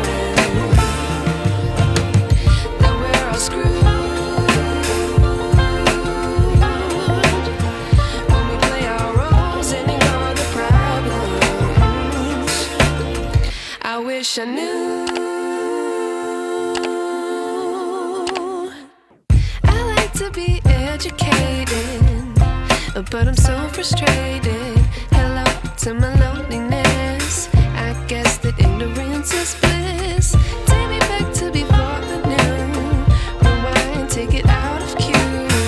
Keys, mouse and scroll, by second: 5.1 right click, 6.1 click, 6.9 ctrl+t, 8.2-9.4 alt+shift+drag, 12.2-14.2 shift+drag, 17.9-20.2 drag, 28.0 right click, 29.1 click, 30.4 ctrl+t, 31.8-32.7 alt+shift+drag.